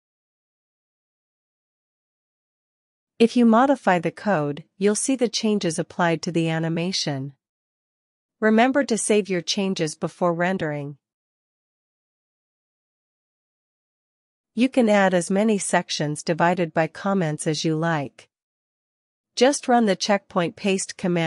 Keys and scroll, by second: 4.8-5.9 typing, 6.0 Escape, 6.2 Down, 6.5 Left, 7.2 alt+BackSpace, 7.5-8.5 typing, 8.9 super+s, 9.7 super+s, 11.8 super+r, 15.2 Return, 15.5-20.4 typing, 19.1 Up.